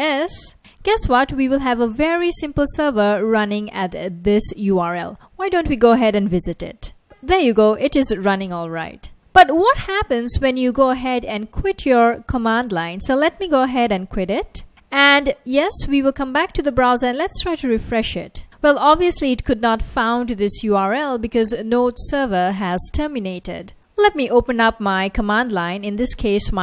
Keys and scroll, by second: 0.0-0.3 typing, 3.5 super+c, 5.4 super+Tab, 6.5 super+Tab, 7.6 F1, 17.8 super+r, 24.9-25.3 typing.